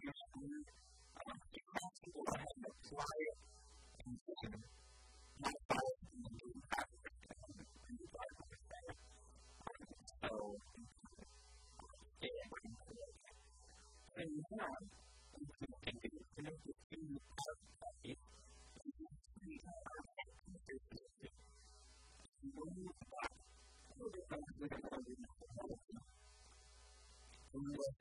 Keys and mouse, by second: 3.1 Tab, 4.0 Tab, 12.9 Tab, 13.3 KP_1, 13.7 KP_3, 18.2 Tab, 21.3 a, 21.5 b, 22.8-24.5 drag, 24.1 a, 25.3 b, 26.7 a, 27.5-28.0 right drag, 27.9 a.